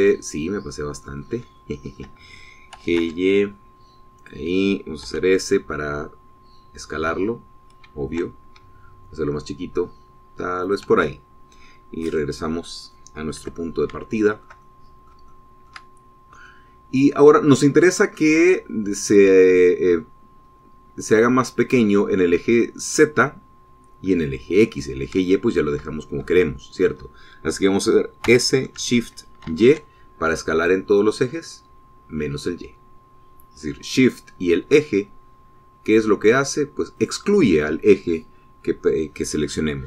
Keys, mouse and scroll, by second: 2.0-2.3 scroll up 2, 2.3 shift+click, 3.5 g, 3.8 y, 5.0 click, 5.8 s, 11.4 shift+click, 12.5-13.8 middle drag, 13.8 click, 14.4 middle click, 14.8-16.0 shift+drag, 16.1 shift+click, 16.1 shift+middle click, 16.8 shift+scroll up 1, 17.2-19.1 shift+middle drag, 26.1-27.2 shift+middle drag, 27.2 shift+middle click, 29.0 s, 30.3 shift+y, 37.8 click.